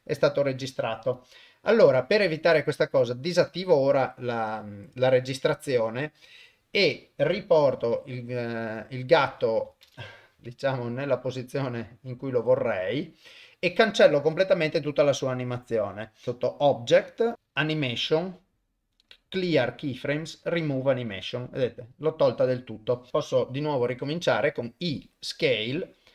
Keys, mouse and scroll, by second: 1.5 shift+Left, 3.5 click, 7.8 alt+g, 10.3 g, 14.3-20.7 drag, 23.1 shift+middle click, 23.9 i.